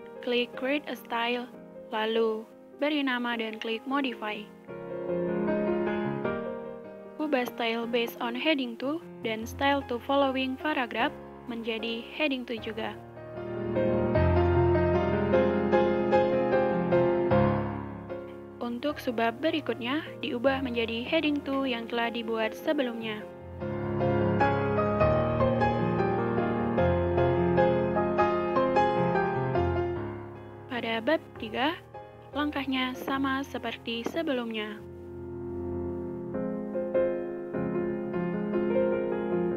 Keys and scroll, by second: 6.0 typing.